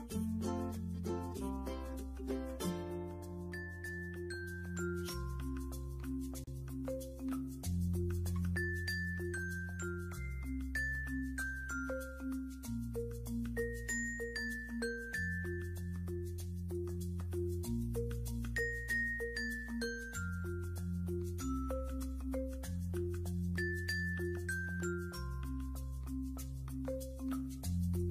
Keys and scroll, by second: 2.2 ctrl+r, 27.9 6.